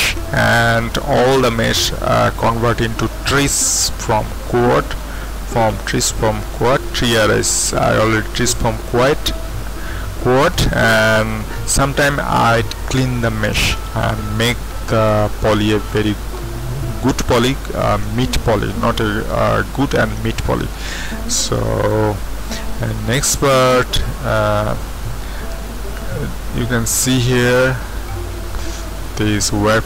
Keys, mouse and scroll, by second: 0.0 scroll down 1, 6.4-7.6 typing, 9.6 Escape, 9.6 typing, 20.2 Home, 21.0-23.7 middle drag, 22.7 z, 23.7 Home, 24.7 z, 26.0-27.0 middle drag, 27.3-29.7 middle drag, 29.7 scroll down 1.